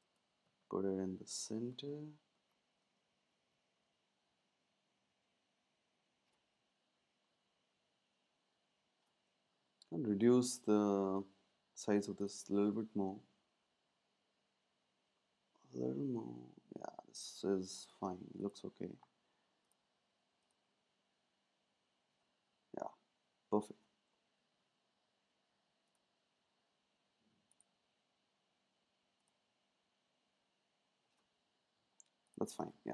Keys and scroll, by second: 0.0 Up, 0.5-3.4 typing, 6.5-7.2 typing, 7.1 Right, 13.3 shift+Down, 24.3 Up, 24.4 Up, 32.6 super+s.